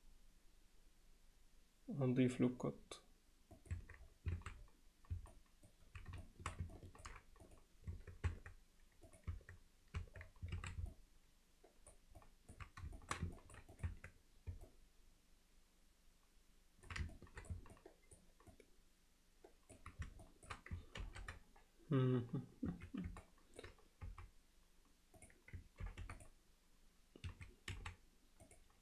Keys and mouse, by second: 3.8 Tab, 4.4 alt+a, 5.3-5.7 alt+middle drag, 6.2 alt+shift+middle drag, 6.8-7.1 ctrl+alt+middle drag, 7.5 click, 8.0 Tab, 8.3 Tab, 9.1 click, 9.3 Tab, 10.0 Tab, 10.6 alt+a, 10.9-11.9 alt+middle drag, 12.2 middle drag, 13.0 alt+shift+middle drag, 13.4 ctrl+alt+middle click, 13.7 click, 13.9 Tab, 14.7-16.9 alt+middle drag, 17.2 ctrl+alt+middle click, 17.8 alt+middle click, 18.5-19.8 middle drag, 20.2 alt+shift+middle click, 21.0 ctrl+r, 23.2 middle click, 24.1 x, 25.8 ctrl+r, 27.8 x.